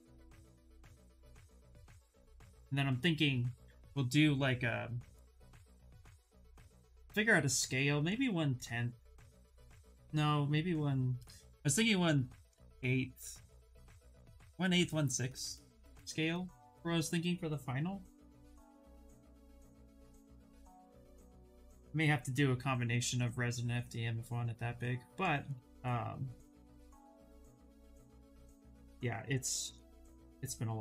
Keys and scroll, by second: 17.6 s, 28.5 s.